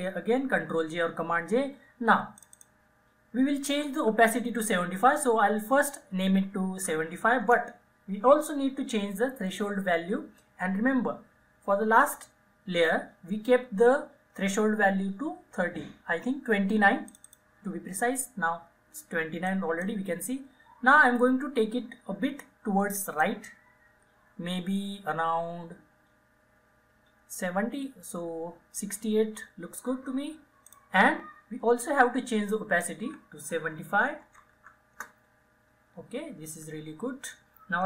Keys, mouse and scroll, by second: 0.9 ctrl+j, 2.4 click, 6.1-7.3 typing, 7.5 Return, 17.1 click, 19.5-22.3 drag, 23.3-30.7 drag, 34.2-35.1 typing.